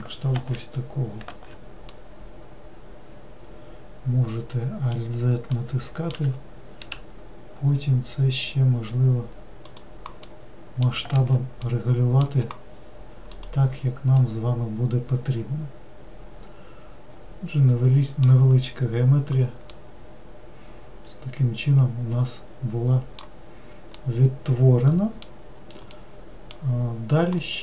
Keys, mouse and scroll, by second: 0.3 alt+x, 1.3 alt+z, 1.9-4.9 middle drag, 5.5-6.8 middle drag, 6.8 s, 10.2 middle click, 11.1 alt+z, 11.7-12.7 middle drag, 12.7-13.3 scroll down 1, 13.3 click, 14.2-17.2 middle drag, 19.7-22.8 middle drag, 22.8 click, 23.4-23.9 scroll down 1, 23.9-27.6 middle drag.